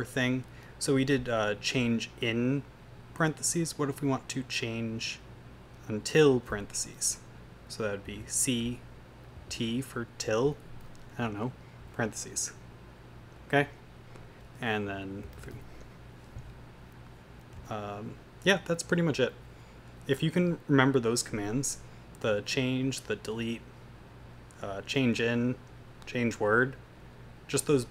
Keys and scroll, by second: 8.1 typing, 9.3 typing, 11.6-12.3 typing, 15.0-16.0 typing, 18.5 Escape.